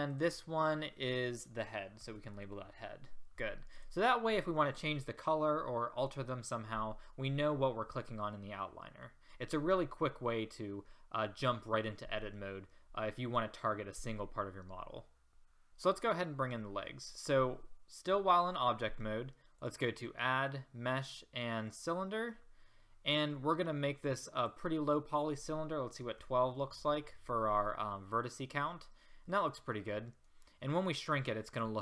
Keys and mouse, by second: 0.1-3.8 drag, 15.7-16.7 drag, 18.1 a, 24.0-26.5 middle drag, 29.4-30.5 middle drag.